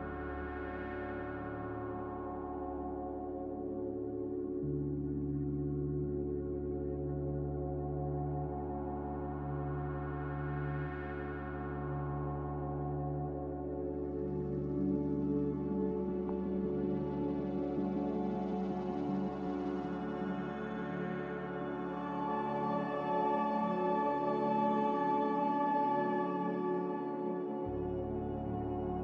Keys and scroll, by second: 1.3 ctrl+v, 2.5 ctrl+c, 7.2 ctrl+c, 11.9 ctrl+v, 17.6 Escape, 21.0 ctrl+c, 26.2 typing.